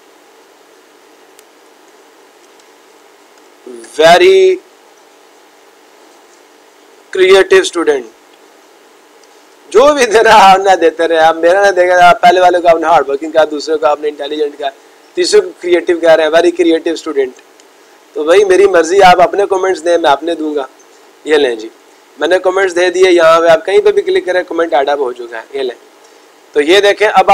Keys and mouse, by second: 23.7 click, 25.1 click, 25.8 click.